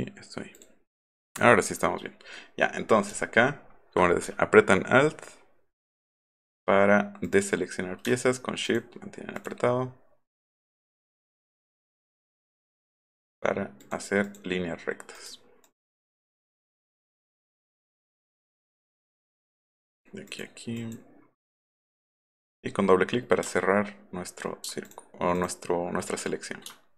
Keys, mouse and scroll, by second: 0.5 click, 1.0 click, 2.4 middle click, 3.1 alt+middle click, 3.4 alt+middle click, 5.9-6.4 alt+scroll up 4, 9.4 shift+click, 10.5 shift+click, 11.3 shift+click, 12.5 shift+click, 13.0 shift+click, 13.8 shift+click, 14.3 shift+click, 15.2 shift+click, 15.6 shift+click, 16.6 shift+click, 17.5 shift+click, 18.0 shift+click, 18.6 shift+click, 19.3 shift+click, 19.9 shift+click, 20.3 shift+click, 20.8 shift+click, 21.7 shift+click, 22.0 shift+click, 24.9 shift+click, 25.4 shift+click.